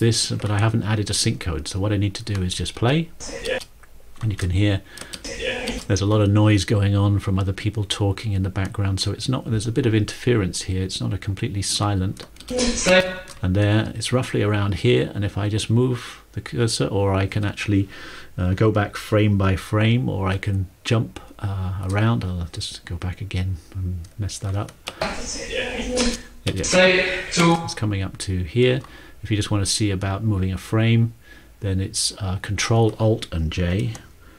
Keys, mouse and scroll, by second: 2.8 ctrl+space, 4.3 ctrl+space, 5.2 ctrl+space, 12.5 ctrl+space, 23.9 ctrl+shift+click, 25.0 ctrl+space, 26.2 ctrl+space, 26.6 ctrl+space, 27.4 ctrl+space.